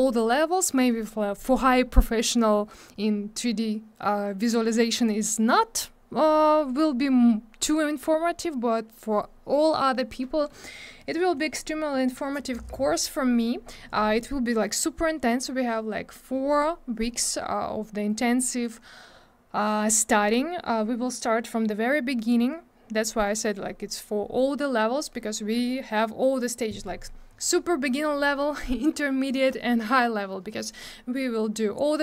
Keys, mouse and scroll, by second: 11.7 scroll down 1.